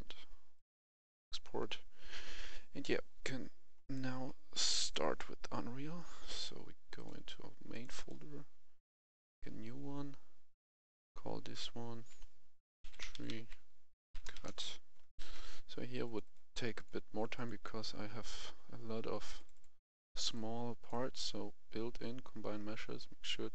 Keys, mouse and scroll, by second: 0.5 click, 7.9 right click, 9.1 click, 12.8-14.3 typing, 14.4 Return, 15.0 F11, 15.1 F10, 15.9-21.7 drag.